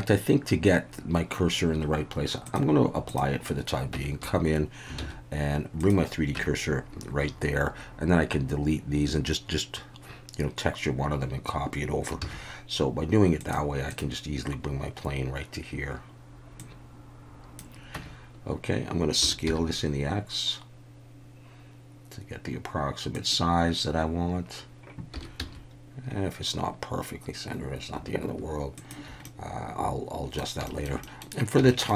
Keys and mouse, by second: 2.5-3.2 drag, 3.9 Tab, 4.2 a, 5.0 shift+s, 6.4 Tab, 12.2 shift+a, 16.7 click, 17.9 Tab, 19.2 s, 19.4 x, 23.1 click, 25.4 x, 28.7 shift+click, 29.2-30.4 middle drag, 30.7 shift+middle click, 31.0 middle click, 31.7 shift+middle click.